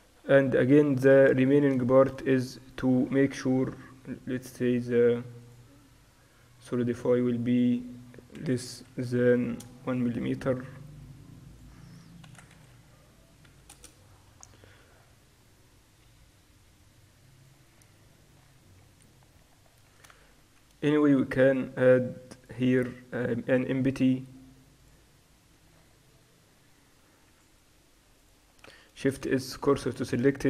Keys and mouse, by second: 0.6 click, 1.0-2.6 drag, 2.6-4.4 middle drag, 4.4-10.3 drag, 4.4 right click, 8.9 0, 11.6-13.3 drag, 12.7 0, 15.5-17.4 middle drag, 16.3 click, 17.4-18.6 drag, 18.6-22.2 middle drag, 20.4 shift+a, 27.3-28.3 middle drag, 27.3 x, 28.3-29.9 drag, 29.3 shift+s.